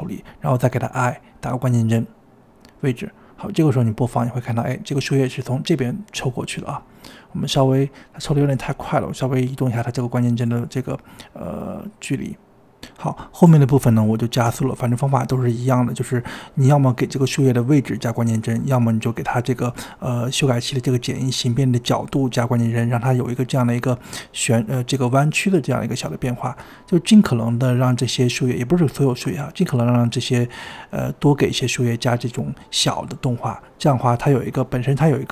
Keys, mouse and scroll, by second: 1.6 i, 3.5 click, 4.2 space, 5.4 space, 7.6-13.0 drag, 13.1 space, 13.4 space, 13.7-14.9 drag, 14.9 shift+middle click, 15.2-17.4 typing, 16.2 click, 17.0 drag, 17.6-18.6 drag, 18.7 shift+middle click, 19.1 click, 20.0 i, 20.3-20.8 drag, 20.8 scroll down 2, 21.0-23.8 typing, 22.3 drag, 23.1 click, 24.1 click, 25.2-27.8 drag, 28.3 click, 29.3 space, 29.6 space, 29.8-32.9 drag, 32.9 i, 33.5-33.9 drag, 33.9 g, 34.7 i, 35.0 click, 35.2 space.